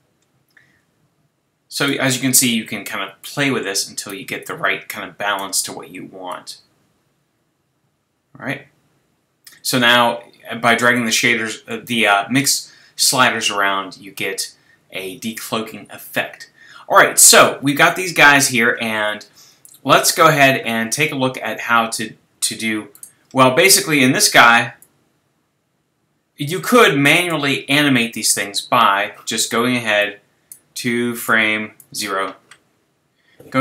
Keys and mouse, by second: 3.2 click, 6.8 click, 30.0-33.6 drag.